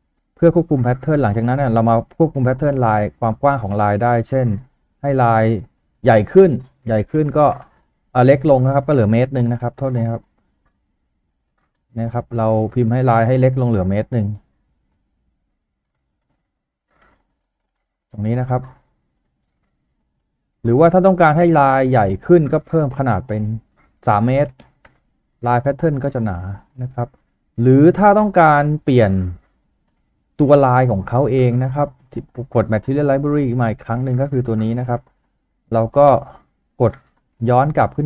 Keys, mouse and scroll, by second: 6.9-7.4 typing, 7.4 Tab, 7.6 Return, 11.6-12.1 scroll up 1, 12.5 middle click, 24.0-24.3 typing, 24.2 Tab, 24.5 Tab, 24.9 Return, 28.4 scroll down 1, 28.6 scroll up 1.